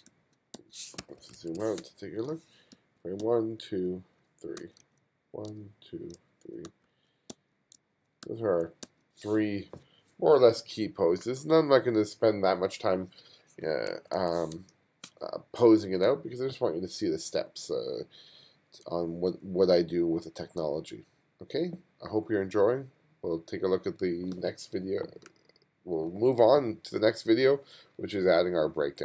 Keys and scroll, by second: 0.0-8.9 typing, 14.0 2, 14.6 space.